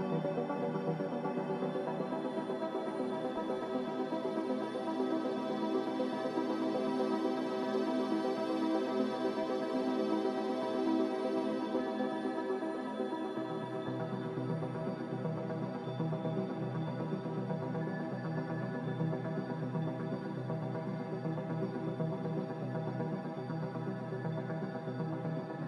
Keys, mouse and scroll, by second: 6.4-8.0 typing, 24.1 ctrl+z, 24.7 ctrl+z.